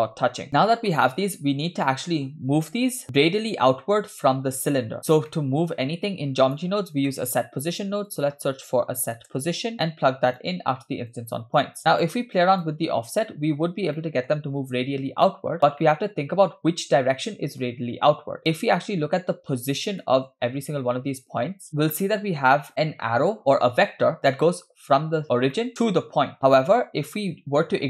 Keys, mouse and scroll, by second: 0.0 scroll up 3, 0.5-0.9 scroll down 2, 1.0-2.3 shift+middle drag, 2.8-4.5 middle drag, 5.0-5.3 scroll down 2, 5.4 middle click, 6.1-6.6 drag, 6.9 scroll up 2, 7.1 middle click, 7.5 shift+a, 11.6 click, 11.9 click, 12.4 click, 14.0 shift+middle drag, 15.9-17.6 middle drag, 18.4-19.3 middle drag, 20.1 middle click, 21.7-22.2 middle drag, 25.5 shift+middle drag.